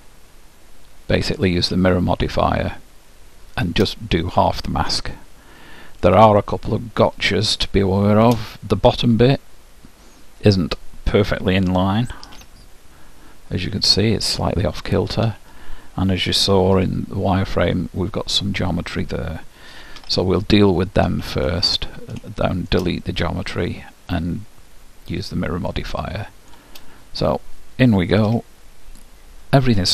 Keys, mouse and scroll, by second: 1.9-3.7 middle drag, 5.1-8.3 middle drag, 12.2 z, 16.5 z, 19.9 z, 21.6-23.5 middle drag, 25.2-26.0 scroll up 1, 26.0 scroll down 1, 28.1 Tab, 28.8 middle click.